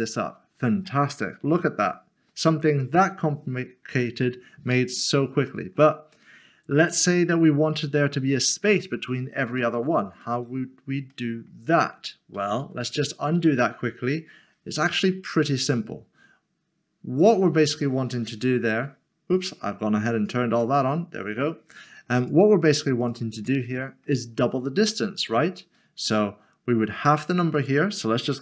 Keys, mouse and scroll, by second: 0.0 click, 0.8 middle click, 4.8 middle click, 11.1 middle click, 12.3 ctrl+z, 15.0 middle click, 17.2 click, 18.3 ctrl+z, 19.1 middle click, 20.3 click, 23.6 middle click, 27.0 click.